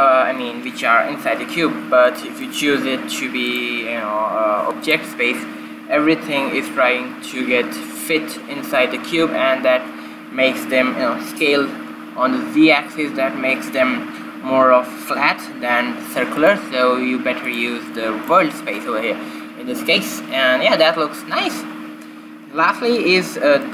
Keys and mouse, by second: 2.9-4.3 right drag, 4.3-5.9 middle drag, 5.9 click, 17.2-20.2 drag, 18.3 right click.